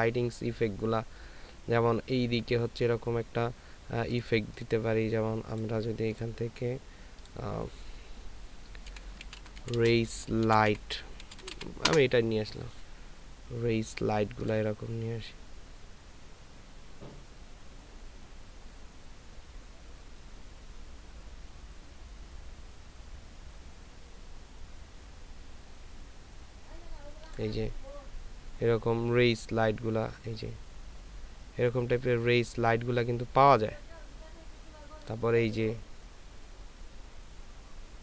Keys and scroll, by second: 9.0-11.6 typing, 11.9 Return.